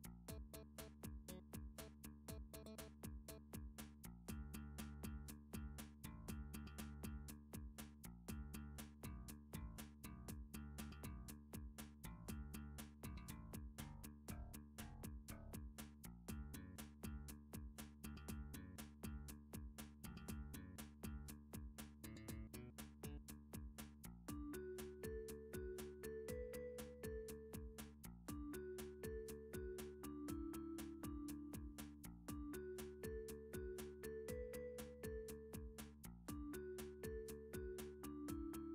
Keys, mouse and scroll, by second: 0.0 middle click, 0.1 middle click, 0.2 middle click, 1.6 click, 2.3 middle click, 2.7 shift+middle click, 2.9 shift+middle click, 3.1 middle click, 6.2 middle click, 6.4 s, 7.2 Escape, 8.3 ctrl+s, 9.6 click, 10.3 click.